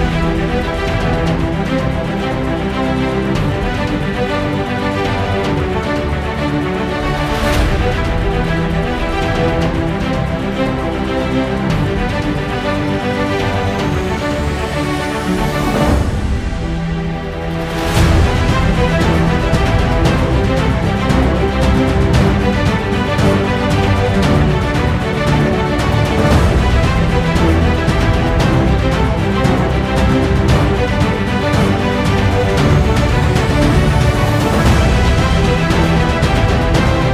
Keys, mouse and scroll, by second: 0.8 click, 1.2 right click, 2.1-3.6 drag, 3.6-5.9 alt+middle drag, 5.9 alt+click, 6.0 alt+middle click, 6.1 scroll up 2, 6.3 alt+click, 6.9 scroll up 1, 7.0 ctrl+z, 9.0 click, 9.7 ctrl+z, 10.0 right click, 10.7 click, 11.3 ctrl+z, 11.6 right click, 12.1 click, 12.8 scroll down 1, 13.0 alt+click, 13.1 scroll up 1, 13.3 alt+middle click, 13.4 ctrl+z, 13.8-16.5 drag, 16.5 f, 16.9 click, 17.8 ctrl+z, 21.0 right click, 21.3 click, 21.6 ctrl+z, 22.1 right click, 23.2 click, 23.5 ctrl+z, 23.6 click, 23.9 scroll down 1, 24.5 click, 24.9 scroll down 1, 25.0 alt+click, 25.3 alt+middle click, 25.4 alt+click, 25.5 scroll up 2, 25.6 click, 25.8 click, 26.1 alt+middle click, 26.2-27.3 alt+drag, 27.3 scroll up 1, 27.4 click, 27.7 alt+middle click, 28.6 right click, 29.1 click, 29.5-29.8 scroll down 1, 29.8 f, 30.0 click, 30.4 ctrl+z, 31.4 alt+click, 31.9 alt+middle click, 32.0-33.0 drag, 33.0 alt+middle click, 33.1 alt+click, 33.1 scroll up 3, 33.3 scroll down 2, 33.5 alt+click, 33.8 alt+middle click, 34.0 f, 34.1 click, 34.3 alt+middle click, 34.4 alt+click, 34.5 ctrl+z, 34.6 click, 34.8 scroll down 1, 34.9 alt+click, 35.3 alt+middle click, 35.3 alt+click, 35.4 alt+middle click, 35.5 ctrl+z, 35.7 alt+click, 35.8 ctrl+z, 35.9 alt+click, 36.0 alt+middle click, 36.4 click, 36.5 alt+middle click, 36.6-37.1 alt+drag.